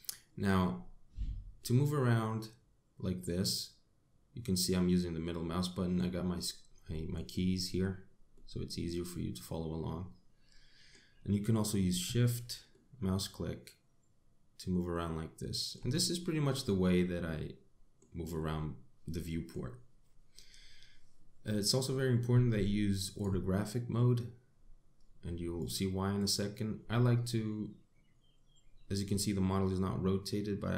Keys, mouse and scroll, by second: 1.4 middle click, 6.8 middle click, 8.2 middle click, 12.6 shift+middle click, 15.9 middle click, 18.2 middle click, 23.0 click, 25.4 click, 26.0 click, 28.9 middle click.